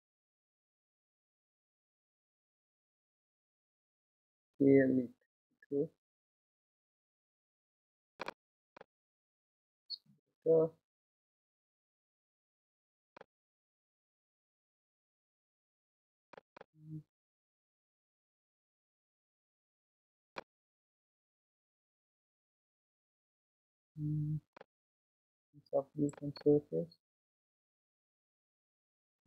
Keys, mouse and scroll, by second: 4.2 s, 8.7-11.8 middle drag, 16.6-20.3 drag, 20.3-23.3 middle drag, 26.3-29.2 drag.